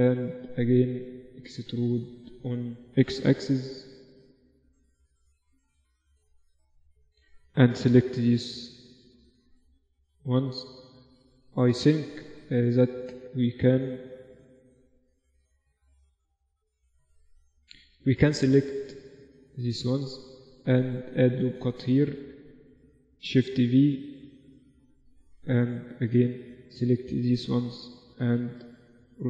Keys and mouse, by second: 0.5 Tab, 1.3-3.7 middle drag, 1.6 a, 1.9 a, 2.3 a, 3.7 e, 7.1-8.8 middle drag, 7.9 g, 11.1-13.2 middle drag, 13.2-14.9 right drag, 13.9 g, 15.7-17.7 middle drag, 17.7-21.2 right drag, 18.5 g, 19.6 g, 21.2 ctrl+r, 24.0 shift+v, 24.9-26.1 drag, 28.1 e, 28.5 right click.